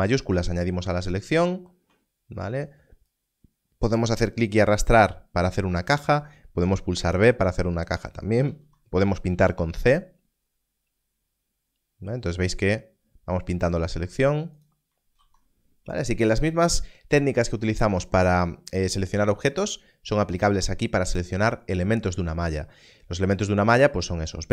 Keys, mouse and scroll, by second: 0.2 shift+click, 3.0 click, 4.7 click, 6.0 alt+a, 6.8 b, 7.4 click, 8.4 alt+a, 9.5 c, 10.1 click, 14.5 right click, 15.4 alt+a.